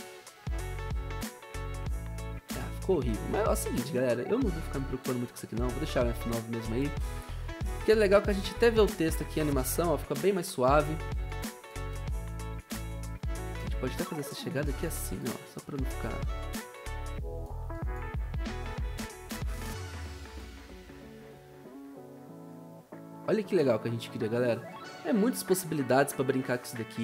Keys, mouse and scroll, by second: 3.8 ctrl+z, 4.5 ctrl+z.